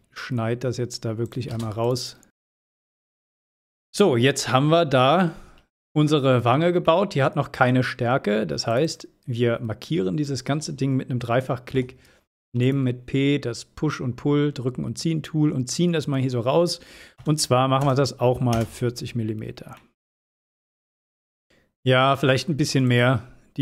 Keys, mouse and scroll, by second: 3.5-4.4 scroll down 1, 5.3 p, 6.2 click, 7.4 scroll down 1, 13.3-14.6 middle drag, 17.4 scroll up 1, 21.4 scroll down 1, 23.1-23.4 middle click.